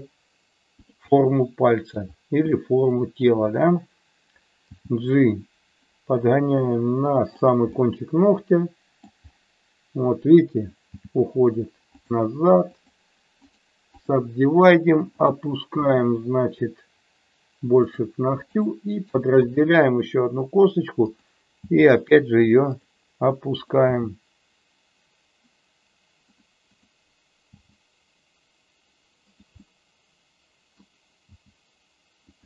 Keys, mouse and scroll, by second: 1.1 middle click, 2.5 middle click, 4.7 g, 7.7-9.0 middle drag, 10.9 g, 11.9 click, 12.7 click, 13.4 right click, 15.8 g, 17.9 click, 18.6 click, 19.0 right click, 21.1 click, 21.6 g, 23.9 g, 26.3 click, 27.5 g, 29.2 click, 29.7-30.8 middle drag, 31.3 g, 32.3 click.